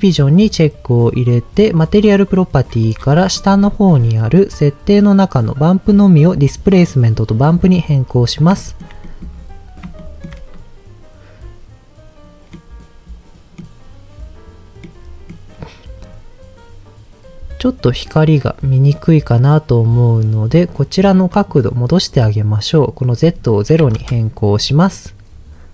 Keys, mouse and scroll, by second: 0.3 click, 1.8 click, 2.3-5.0 scroll down 11, 5.8-7.4 drag, 8.6 shift+middle click, 9.0 middle click, 9.3 scroll up 1, 9.9 scroll up 2, 10.0 shift+middle click, 12.5-13.7 middle drag, 14.8-15.4 middle drag, 16.0-17.2 scroll down 2, 17.2-17.8 scroll down 2, 17.8-18.9 scroll down 3, 19.3 click, 21.3 click, 22.9-24.0 drag.